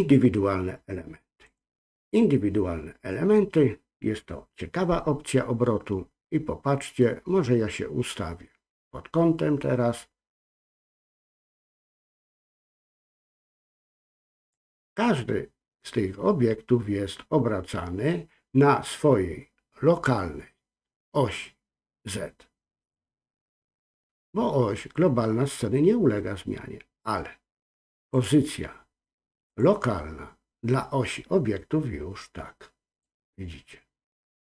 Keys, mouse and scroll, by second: 3.2 scroll down 1, 4.2-7.0 scroll up 1, 7.0-9.7 middle drag, 11.4-14.5 drag, 28.1-29.8 drag, 33.0-34.4 drag.